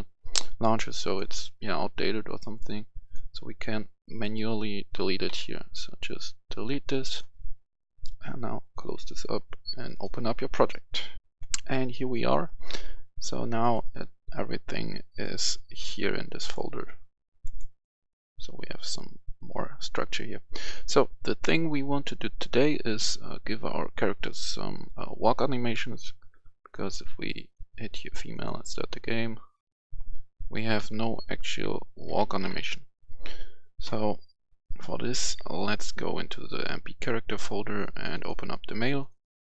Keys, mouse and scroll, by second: 5.2 Delete, 7.0-9.6 drag, 11.2 F10, 13.7 click, 30.7-32.4 typing, 32.6 Escape, 35.4 click.